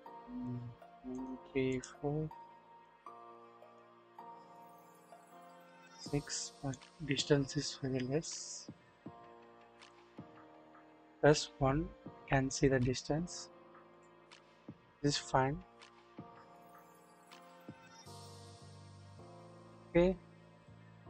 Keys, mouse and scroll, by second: 0.5 click, 1.1 click, 1.7 click, 2.8 click, 5.1 click, 6.7-9.9 drag, 10.6 KP_1, 11.2-13.7 scroll, 13.7-14.2 scroll up 2, 13.9 click, 14.2-14.8 scroll down 1, 14.8-19.7 drag, 20.6-21.0 drag.